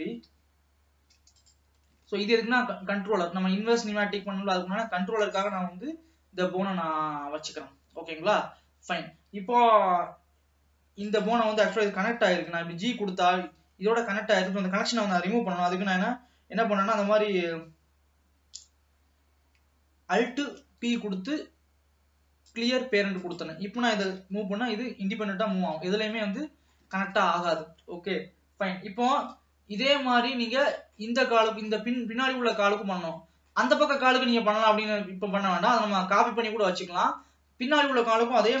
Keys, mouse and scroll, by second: 2.1-2.4 scroll down 3, 2.4 ctrl+s, 4.4-4.9 scroll up 1, 11.1 click, 12.3 g, 20.6 alt+p, 23.2 click, 24.4 g, 26.0 scroll down 2, 26.3-27.3 middle drag, 27.3 ctrl+s, 29.4-38.6 middle drag.